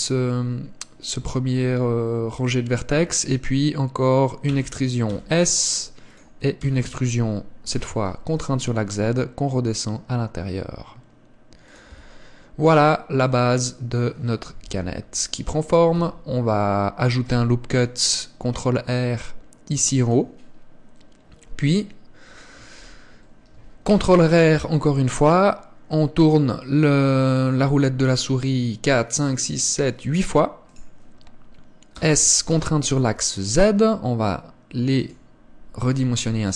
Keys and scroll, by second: 4.6 e, 6.7 e, 12.0 Tab, 14.8 KP_1, 16.0 Tab, 17.3 ctrl+r, 24.0 ctrl+r.